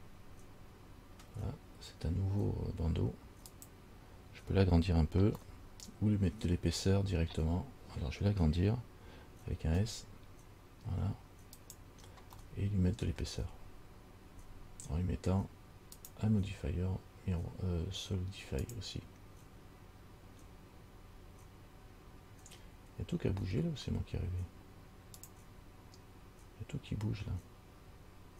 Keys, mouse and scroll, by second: 5.7 middle click, 9.8 s, 12.6 middle click, 16.2 click, 18.9 click, 25.4 click.